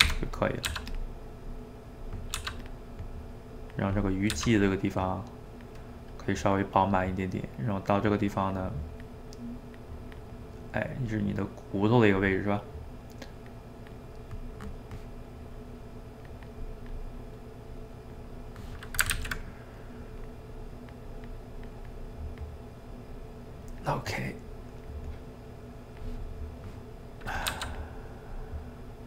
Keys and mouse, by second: 0.1 g, 0.3 middle click, 0.7 f, 1.1-2.3 middle drag, 2.3 f, 2.8 middle click, 3.5 click, 3.9 middle click, 4.3 f, 4.8 middle click, 5.4 click, 5.9 middle click, 6.4 click, 6.8 middle click, 7.7-10.3 drag, 10.3-12.7 middle drag, 12.7-14.1 drag, 14.1-15.5 middle drag, 15.5-18.3 drag, 18.3 middle click, 19.2 ctrl+z, 19.8-22.5 drag, 22.5 middle click, 23.2 click, 23.9 middle click, 24.5-26.3 drag, 26.3-27.5 middle drag, 27.5 f, 27.9 middle click, 28.8-29.0 drag.